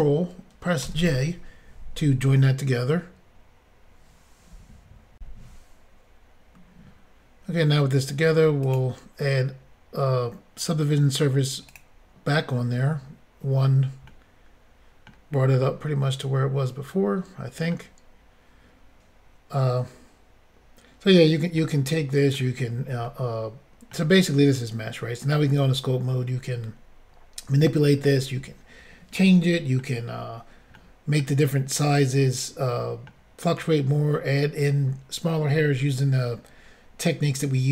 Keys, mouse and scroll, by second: 0.8 ctrl+j, 5.2 Insert, 8.6 click, 8.7 click, 11.7 click, 11.8 click, 14.1 middle click, 15.7 middle click, 21.6 middle click, 23.0 middle click, 29.3 middle click, 29.4-29.8 scroll up 1, 30.8 middle click, 31.9 middle click.